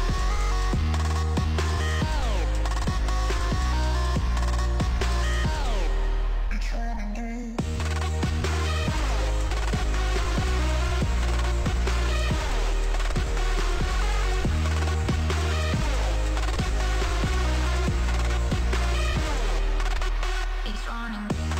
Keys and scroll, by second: 3.7 ctrl+s, 5.2 space.